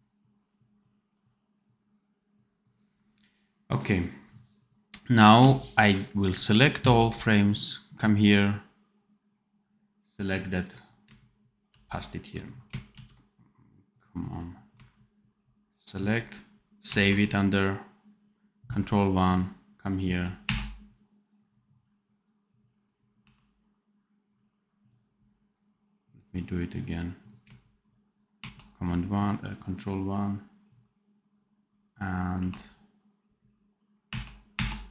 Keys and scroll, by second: 6.7 ctrl+c, 11.6 ctrl+v, 12.8 ctrl+z, 16.7 ctrl+1, 20.3 1, 23.1 1, 28.3 ctrl+1, 32.2 1, 34.2 1.